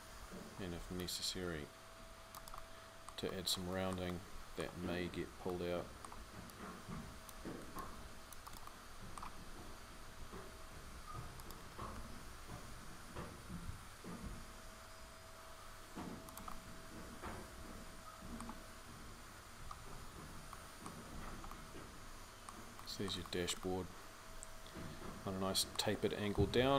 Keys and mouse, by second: 3.6-12.4 middle drag, 12.4 g.